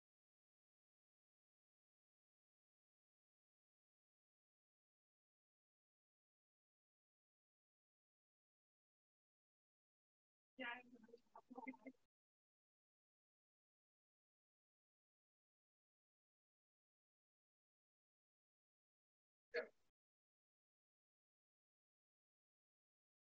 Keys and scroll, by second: 6.5 Escape, 13.3 2, 18.6 BackSpace, 18.7 1, 19.2 shift+', 19.5 Return.